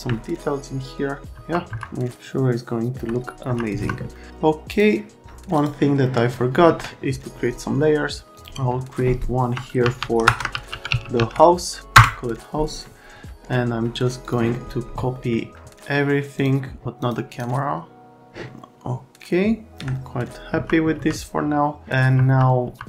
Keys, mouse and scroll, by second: 0.1 alt+middle click, 1.3 F3, 1.7 F3, 2.1 alt+middle click, 3.4 F3, 3.8 F3, 4.1 right click, 4.7 click, 5.5 click, 8.3 click, 9.8-11.6 typing, 11.9 Return, 14.2 click, 15.1 middle click, 16.3 click, 17.0 click, 17.3 scroll, 19.7 right click, 20.6 F3, 20.9 F3, 22.2 F3, 22.6 F3.